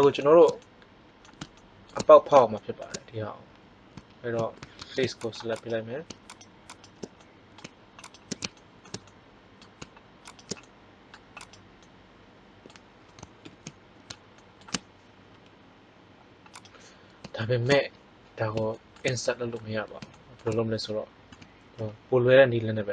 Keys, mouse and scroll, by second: 4.7 ctrl+Tab, 8.4-9.9 middle drag, 10.2-12.0 right drag, 13.3 ctrl+l, 15.2 i, 21.2 s.